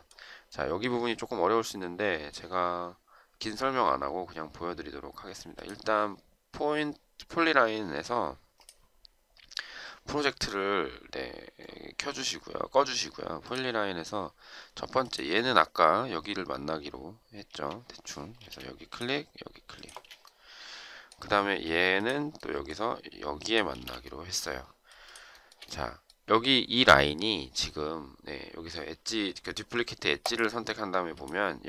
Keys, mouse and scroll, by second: 17.1 space, 18.2 space, 19.7 space, 21.2 space, 23.6 space, 25.1 shift+right click, 25.3 shift+double right click.